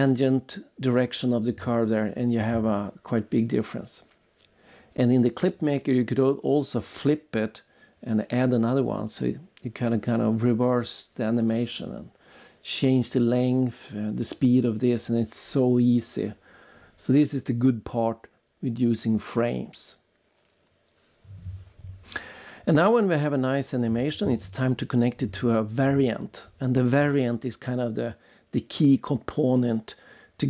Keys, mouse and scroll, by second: 1.5 click, 2.6 click, 3.0 right click, 4.5 click, 5.3 click, 7.1 click, 7.2 click, 10.8 click, 11.5 click, 12.2 click, 13.4 click, 13.4 click, 17.3 click, 19.3 click, 20.0 click, 20.1 click, 21.9 click, 22.9 click, 23.7 click, 24.4-26.8 typing, 28.5 click.